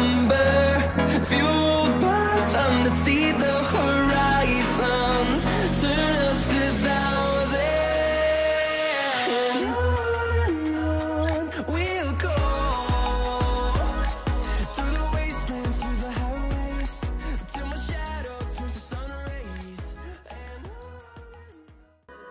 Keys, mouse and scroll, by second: 0.1 scroll down 1, 1.2 scroll up 1.